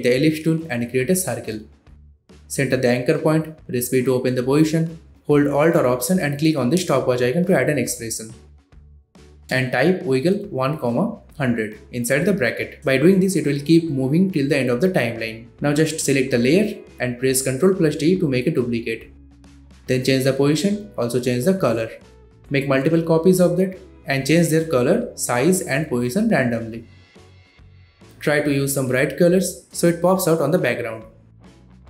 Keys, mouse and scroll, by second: 1.2-2.4 shift+drag, 2.8 ctrl+alt+Home, 3.3-3.8 click, 4.1 p, 5.0 alt+click, 5.6-7.1 typing, 7.2 Return, 8.4-11.3 typing, 11.7-14.2 drag, 15.2 ctrl+d, 15.9-16.8 drag, 19.8 ctrl+d, 20.4-21.1 drag, 24.2 s, 24.8-25.4 drag, 27.8 ctrl+d, 28.3-28.9 drag, 29.6 s, 30.1-31.0 click, 31.3 ctrl+d, 31.3 click, 31.6 s, 31.6 click, 31.6 ctrl+d, 31.7 click, 31.8 ctrl+d, 31.8 click.